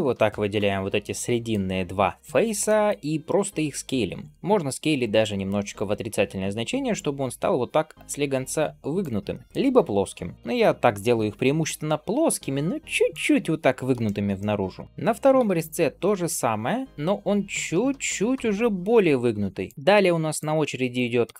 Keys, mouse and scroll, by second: 0.9 middle click, 2.5 middle click, 3.1 s, 9.2 middle click, 13.9 shift+middle click, 14.2 middle click, 19.7 middle click, 19.7 scroll down 2, 20.2 shift+click, 20.8 middle click, 21.3 scroll down 2.